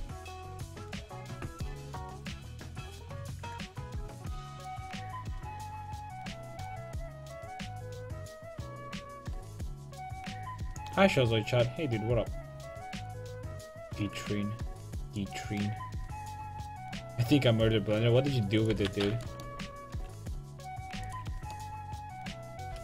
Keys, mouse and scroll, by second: 19.5 a, 20.6-22.7 right drag, 21.0 x.